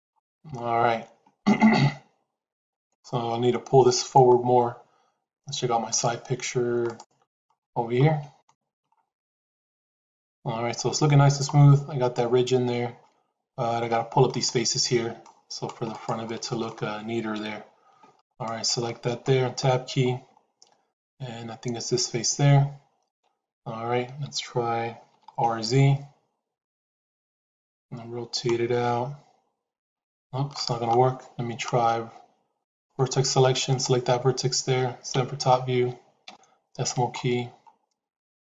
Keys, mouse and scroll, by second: 0.9 shift+z, 8.3 shift+middle click, 13.8 shift+middle click, 14.4 middle click, 16.1 middle click, 17.2 KP_1, 18.2 click, 18.8 shift+middle click, 19.6 Tab, 20.8 click, 25.0 r, 35.0 KP_7, 36.2 KP_Decimal.